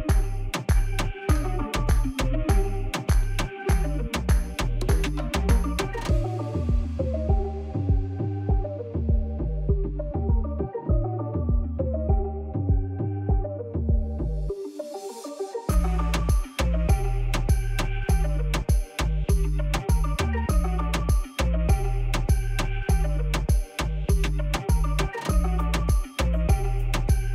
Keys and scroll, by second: 0.0 alt+a, 6.7 s, 11.3 alt+a, 13.7 ctrl+j, 24.1 ctrl+z.